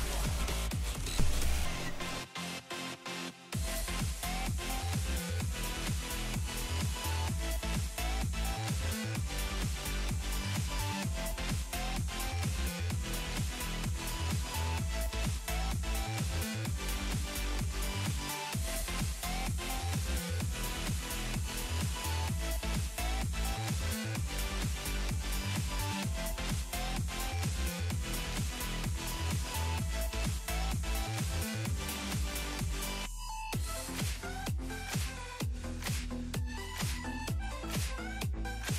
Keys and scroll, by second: 21.8 s.